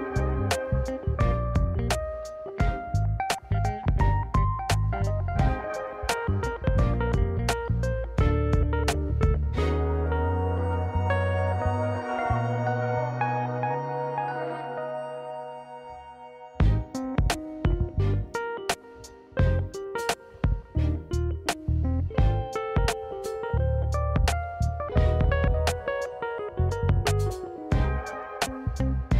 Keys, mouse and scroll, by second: 0.0 click, 0.9-1.3 drag, 1.9 click, 2.7-5.0 drag, 6.2 Tab, 7.5 click, 8.1 click, 8.4 scroll down 2, 8.6-9.0 middle drag, 9.1 click, 9.3 right click, 11.9 middle drag, 12.2-12.7 scroll up 3, 12.5 middle drag, 12.7 scroll down 1, 12.8 scroll down 2, 13.0-13.9 middle drag, 14.0 scroll down 1, 14.3 middle click, 14.6 drag, 14.7 middle drag, 15.6 click, 16.2 KP_1, 16.5 g, 18.7 shift+middle click, 19.0-19.4 scroll down 2, 19.2 middle click, 19.5 s, 20.6 ctrl+z, 21.4 click, 21.9 s, 23.5-24.1 scroll up 1, 24.1-24.5 scroll up 2, 24.1 KP_Decimal, 24.5-24.8 scroll down 2, 24.8 middle drag, 25.1 scroll up 2, 25.3 shift+middle click, 25.5-26.2 scroll down 1, 26.2-29.1 drag, 27.4 s, 27.5 BackSpace, 27.6 BackSpace, 27.8 BackSpace.